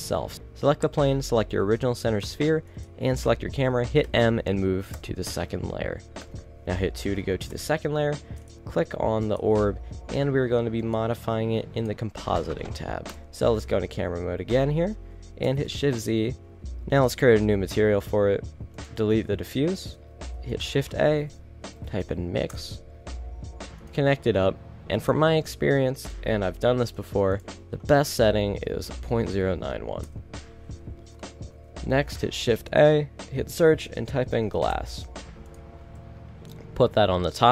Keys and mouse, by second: 0.1 a, 0.3 z, 1.7-2.3 middle drag, 4.2 m, 6.4 2, 7.2 a, 7.6 KP_0, 8.5 right click, 13.3 KP_0, 15.8 shift+z.